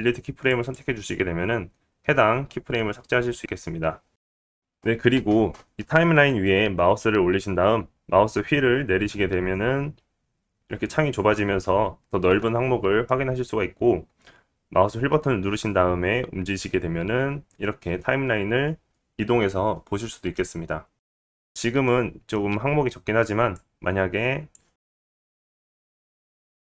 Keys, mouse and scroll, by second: 4.6-5.3 scroll down 1, 9.0-10.6 scroll down 8, 11.9-12.6 scroll down 2, 12.6-14.2 scroll down 3, 14.2 middle click, 22.5-24.2 scroll up 7, 24.2 middle click, 24.8 scroll up 1, 25.1 click, 25.1 middle click, 25.1 right click, 25.8 i, 26.4 click, 26.4 middle click, 26.4-26.6 right drag.